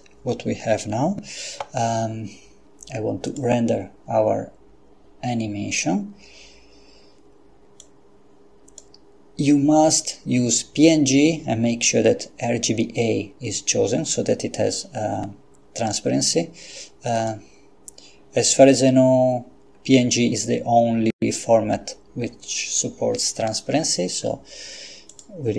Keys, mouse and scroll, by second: 3.3 click, 7.8-9.3 drag, 17.2 click, 25.1 click.